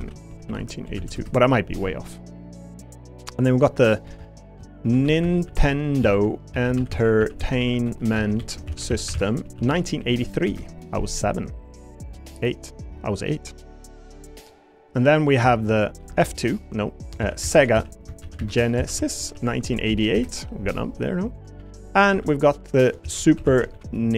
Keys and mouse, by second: 3.8 click, 4.1 F2, 11.7 click, 17.1 F2, 19.9 8, 22.1 F2.